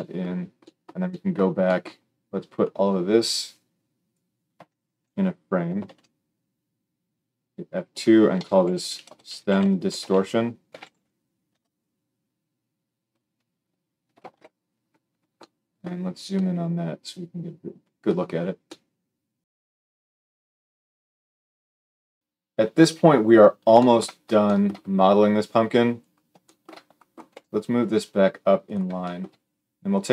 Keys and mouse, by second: 5.8 ctrl+j, 7.3 F2, 14.1 ctrl+alt+space, 22.2-28.5 drag, 27.1 g, 28.5-29.7 shift+middle drag, 29.7 click, 29.8 middle click.